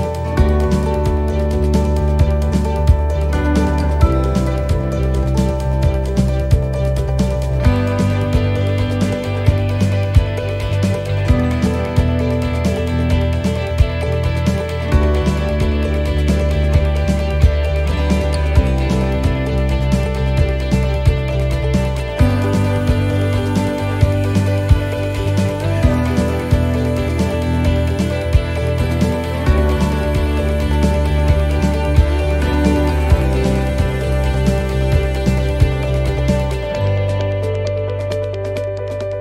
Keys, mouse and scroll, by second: 0.5 shift+right click, 2.0 shift+right click, 3.6 shift+right click, 9.0 shift+right click, 9.2 middle click, 9.5 scroll down 2, 11.1 e, 12.2 s, 13.9 middle click, 15.2 a, 16.2 s, 17.9 middle click, 19.7 s, 21.6 scroll down 1, 21.8 middle click, 23.1 scroll down 2, 23.5 middle click, 24.1 middle click, 24.6 middle click, 26.0 click, 27.2 middle click, 28.8 s, 30.8 middle click, 32.6 shift+middle click, 32.9 scroll up 3, 33.2 middle click, 33.8 shift+middle click, 34.1 scroll up 2, 34.4 middle click, 34.9 shift+middle click, 35.5 middle click, 36.7 ctrl+r, 37.7 middle click.